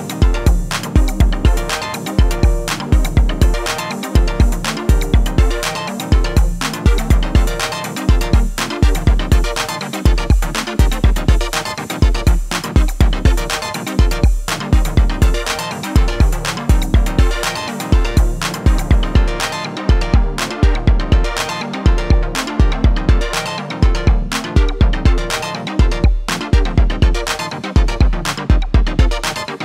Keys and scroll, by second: 21.8 1, 22.1 6, 22.5 ., 22.9 5, 23.5 Return.